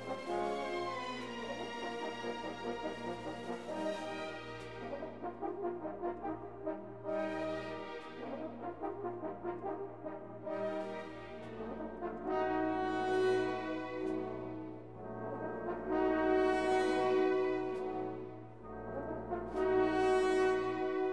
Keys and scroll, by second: 14.0 6, 14.7 Return.